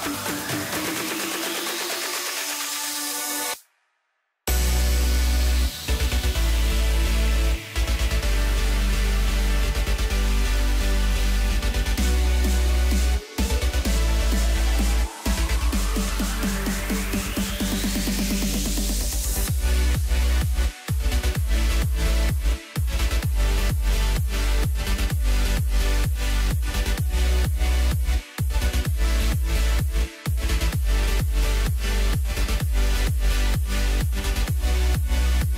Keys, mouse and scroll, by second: 0.6 click, 1.5 g, 5.0-5.4 scroll up 4, 5.4 scroll down 3, 8.2 click, 9.3-11.8 drag, 11.8-12.6 scroll up 1, 12.6 scroll down 1, 14.8 click, 15.9 click, 17.1 click, 17.5-18.7 drag, 19.4-21.6 drag, 21.6-22.0 scroll down 2, 22.0-22.4 scroll up 3, 22.4-23.0 scroll down 3, 23.0-23.3 scroll down 4, 23.3-23.9 middle drag, 23.9 click, 24.6 scroll down 1, 26.2 Tab, 26.7 middle click, 27.3 scroll up 2, 28.4 click, 29.8 click, 30.2 click, 31.7 Tab, 32.4 KP_Decimal, 33.1 scroll up 4, 33.3 scroll down 2, 33.6-35.5 middle drag.